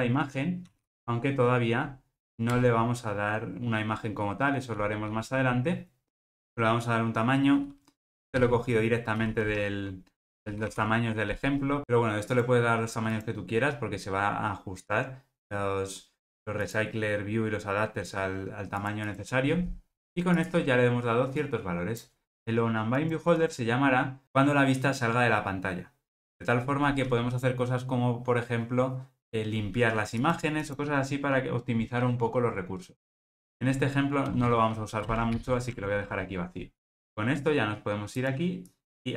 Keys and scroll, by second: 5.1 Return, 6.1 super+p, 35.9 alt+super+l.